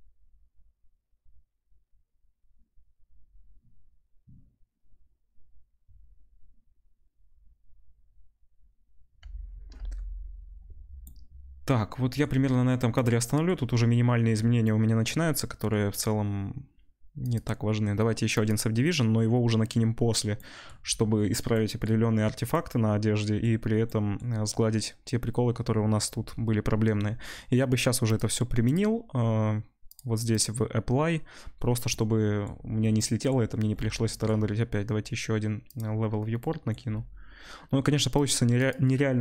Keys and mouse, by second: 10.8 space, 15.9-20.8 middle drag.